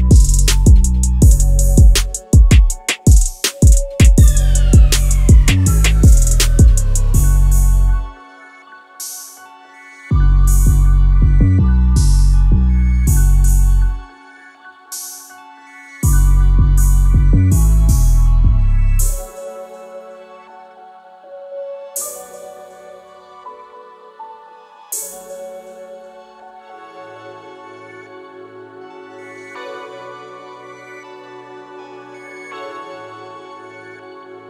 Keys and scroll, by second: 2.5 Return, 4.2 Escape, 19.8 Escape, 23.5 2, 23.6 Return, 26.9 Escape, 27.3 2, 27.5 Return.